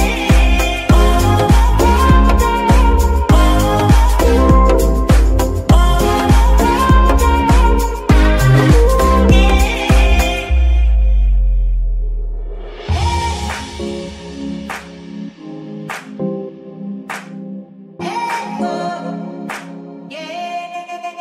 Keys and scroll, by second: 5.8 Tab, 6.0 z, 10.4 Tab, 12.0 ctrl+s.